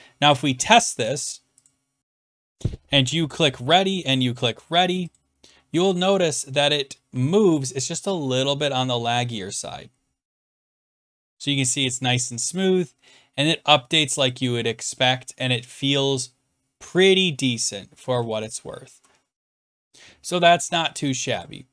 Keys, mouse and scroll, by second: 1.7 click, 3.5 click, 4.5 click, 5.1 click, 9.3-9.8 scroll down 1, 9.8 scroll down 2, 9.9 Down, 9.9 Down, 10.4-11.7 Right, 12.0-13.5 Down, 14.4-14.9 Up, 15.5-16.5 Down, 15.5 Up, 17.4-17.9 Up, 18.1 Down, 18.1 Up, 18.6 Down, 18.8 Down, 18.9 Down, 19.8 Right, 19.8 Left, 21.5 click.